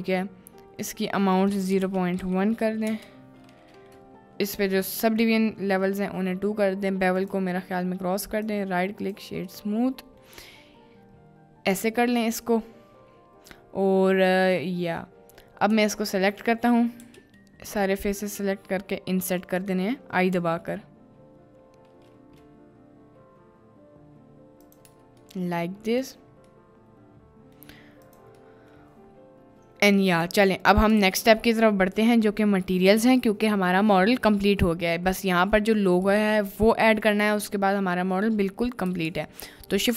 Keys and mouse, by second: 1.5-2.9 drag, 5.0 click, 6.0-6.3 middle drag, 7.1 click, 8.4-9.1 drag, 9.6-10.1 middle drag, 15.1 middle drag, 15.8 Tab, 16.0 middle click, 17.0 a, 18.3 i, 19.8 click, 20.3 i, 24.9 Tab, 25.2 middle click, 26.0 click, 26.6-27.6 middle drag, 28.1 click, 28.5 middle click, 30.1 drag, 30.6 middle click, 31.1 ctrl+s, 31.4 middle click, 32.1-33.2 middle drag, 33.5-33.9 middle drag, 35.6 middle click, 37.0 middle click, 39.0 shift+a.